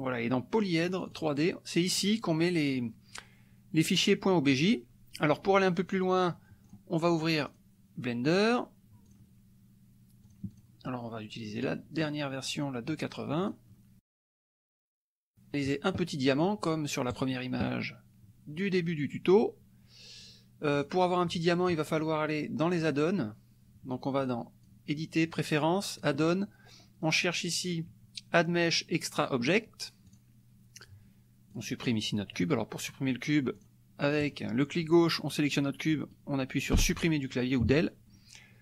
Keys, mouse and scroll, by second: 1.0 click, 2.0 click, 6.6 click, 7.5 click, 8.3 click, 9.3 click, 10.2 click, 11.5 click, 13.3 click, 17.1 click, 20.7 click, 21.9 click, 22.7 click, 24.2 click, 24.8-25.9 middle drag, 25.9 click, 26.6-27.2 scroll down 1, 27.2 middle click, 27.4 scroll down 1, 27.6-30.0 middle drag, 30.0 click, 31.5 click, 33.6 click, 34.3-36.7 drag, 36.7 Delete.